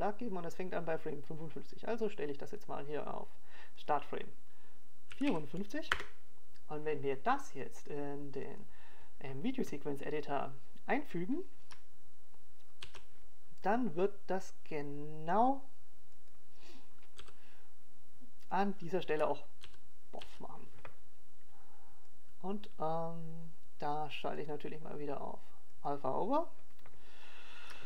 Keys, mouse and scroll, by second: 2.2 click, 8.0 click, 11.8 click.